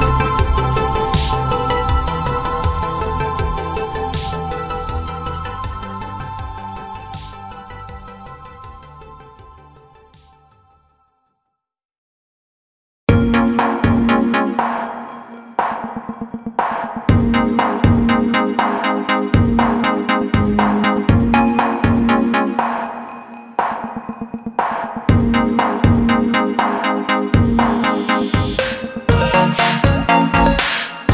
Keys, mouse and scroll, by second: 4.1 click, 10.1 i, 10.8 click, 14.9 alt+click, 16.2 right click, 18.2 click, 22.9 click, 28.3 click.